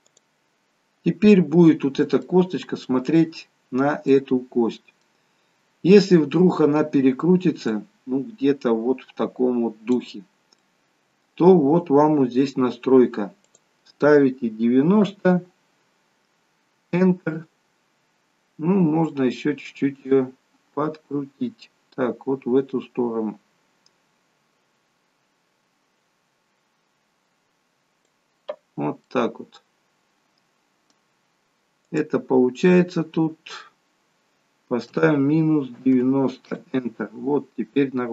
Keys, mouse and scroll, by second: 1.8-2.5 scroll down 4, 2.3 middle click, 4.3 middle click, 7.9 click, 10.8 middle click, 13.6 click, 19.2 click, 29.1 middle click, 31.9 click.